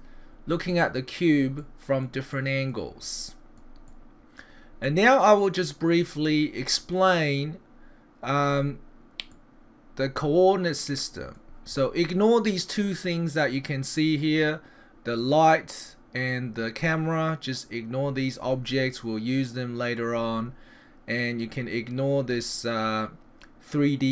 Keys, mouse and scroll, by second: 0.1-0.7 scroll down 3, 0.7 middle click, 1.6 middle click, 3.0 middle click, 3.9 middle click, 4.9 middle click, 6.2 middle click, 9.3 middle click, 18.7 middle click.